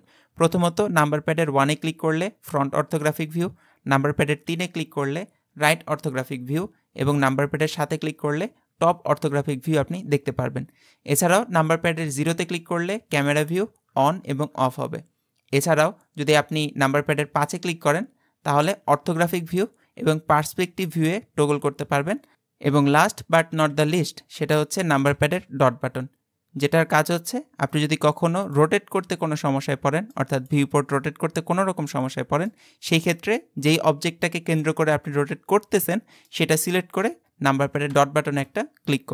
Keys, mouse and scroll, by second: 1.5 KP_1, 4.5 KP_3, 7.7 KP_7, 12.3 KP_0, 13.9 KP_0, 17.5 KP_5, 17.9 KP_5, 18.9 KP_5, 19.4 KP_5, 20.7 KP_5, 21.5 KP_5, 23.5 KP_5, 24.4 KP_5, 25.5 KP_Decimal, 28.5 click, 29.0-30.4 middle drag, 30.4 click, 31.0-32.8 middle drag, 32.8-33.4 scroll up 2, 33.4-36.4 middle drag, 38.0 KP_Decimal.